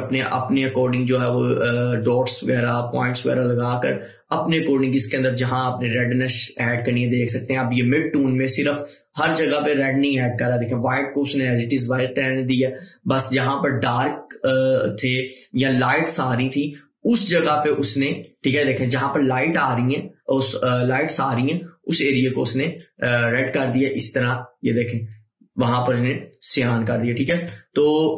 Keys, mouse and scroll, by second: 17.2 click, 17.2-20.8 drag, 22.9-28.1 drag.